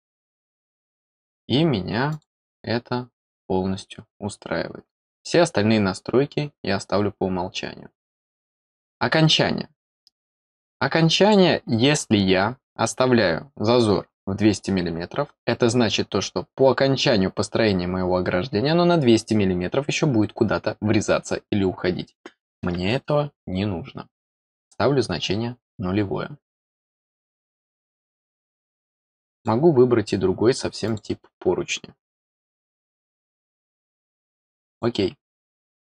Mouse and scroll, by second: 2.1 click, 3.9 middle click, 8.0 click, 10.7 click, 24.2 click, 28.0 click, 29.3 click, 30.8 click, 32.3 click, 34.7 click, 35.6-35.8 scroll up 2.